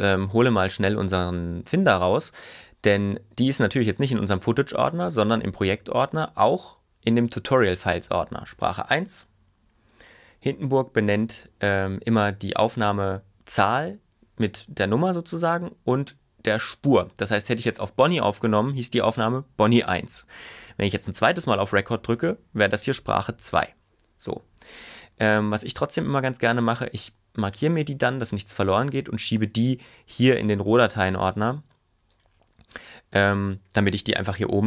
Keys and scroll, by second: 34.5 ↻.